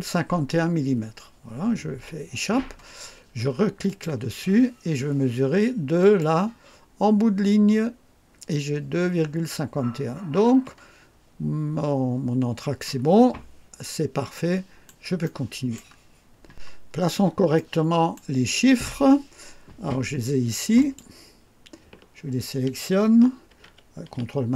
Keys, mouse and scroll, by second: 1.9 Escape, 3.8 click, 5.9 click, 10.4 Escape, 12.7-14.0 scroll down 4, 14.2-15.0 right drag, 15.1-15.8 right drag, 16.9-17.2 scroll up 2, 17.6 right click, 20.8 click.